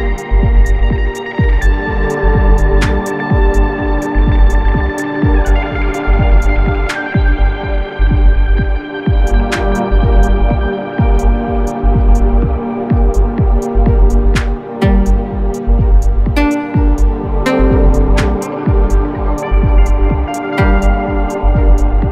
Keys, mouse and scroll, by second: 11.5 typing, 13.7 typing, 14.7 click, 15.9 Up, 19.7 click, 20.0 space, 20.2 ctrl+click, 20.5 ctrl+space, 21.9 click.